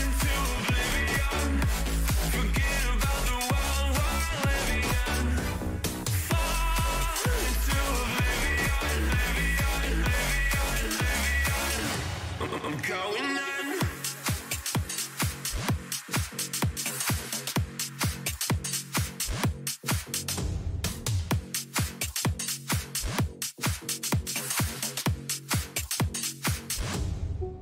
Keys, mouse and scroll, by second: 1.6-2.7 middle drag, 2.0 z, 2.7 a, 5.8 b, 9.4 g, 21.9 a, 24.1-27.0 middle drag.